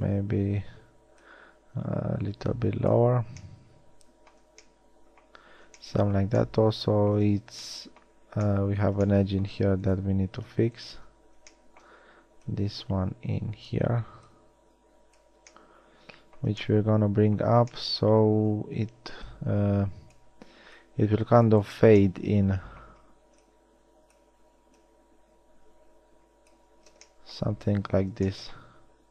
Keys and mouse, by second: 3.3 a, 4.9 middle click, 7.4 z, 11.2 z, 11.7 click, 12.6 click, 15.6 middle drag, 16.0 middle click, 22.5-26.8 middle drag, 26.8 a, 27.2 middle click.